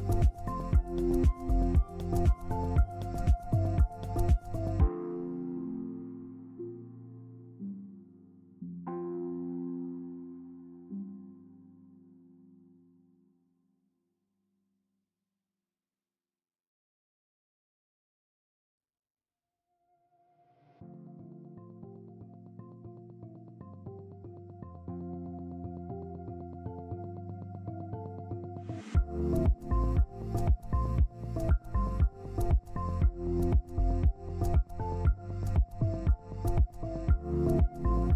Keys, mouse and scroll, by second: 2.1 Up, 2.3 Up, 2.7 Left, 3.2 right click, 5.9 scroll up 1, 8.2 ctrl+click, 9.4 ctrl+space, 9.4 click, 9.8 shift+click, 10.0 typing, 10.8 scroll down 1, 11.8 double click, 15.8 right click, 16.5 scroll down 1, 17.8 double click, 19.2 ctrl+g, 19.9 ctrl+g, 20.5 ctrl+z, 21.3 double click, 22.6 shift+right click, 25.4 shift+right click, 25.9 scroll up 1, 26.6 ctrl+click, 32.2 ctrl+z, 35.1-38.1 drag, 35.1-37.4 middle drag.